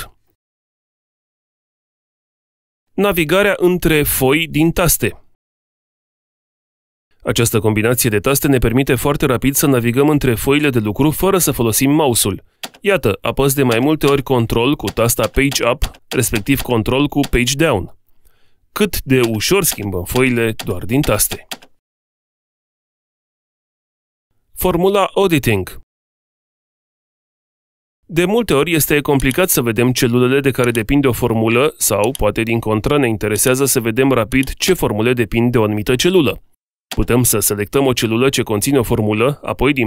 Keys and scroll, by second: 14.0 ctrl+Page_Up, 17.0 Page_Down.